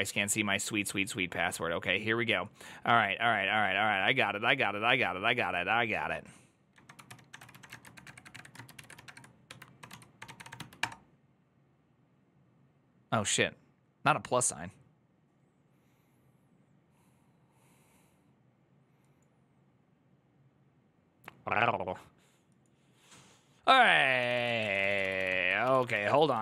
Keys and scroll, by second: 7.7-10.6 typing, 10.6 Return.